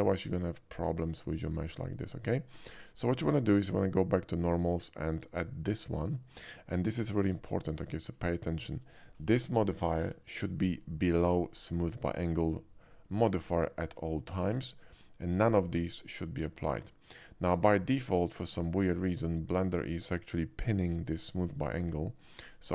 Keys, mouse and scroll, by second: 3.0 typing, 6.0 click, 7.5 shift+middle click, 7.9 shift+middle click, 8.3 shift+middle drag, 22.5 click.